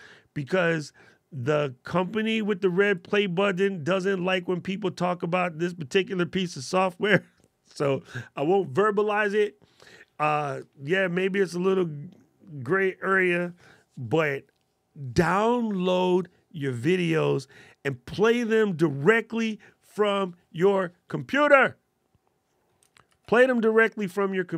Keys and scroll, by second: 22.7 shift+super+b.